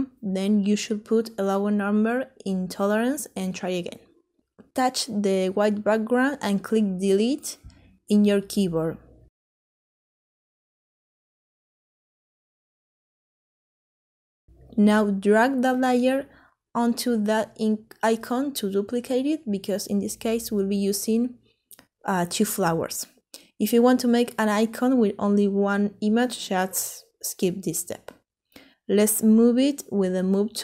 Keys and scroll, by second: 6.0 Delete.